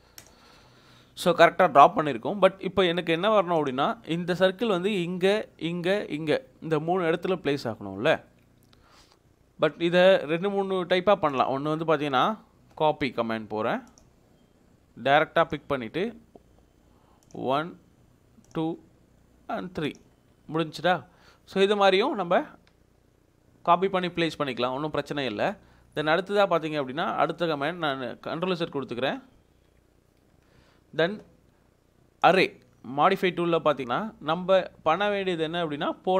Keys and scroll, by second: 8.7 Escape, 20.4 Escape, 26.1 ctrl+x, 27.1 Escape, 28.3 ctrl+z, 28.9 ctrl+z, 31.6 ctrl+z.